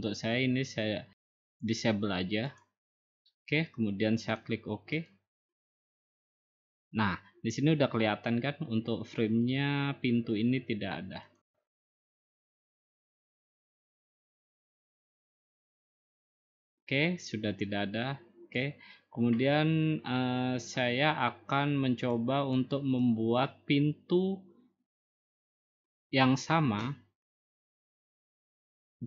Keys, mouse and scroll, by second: 1.6 click, 2.6 click, 5.1 click, 7.8-9.1 scroll down 8, 9.1 scroll up 3, 9.5-10.6 scroll, 11.4 click, 18.6-19.7 drag, 20.9 click, 21.0-22.0 scroll, 22.6 click, 23.5 click, 23.9 middle click, 24.0 middle click.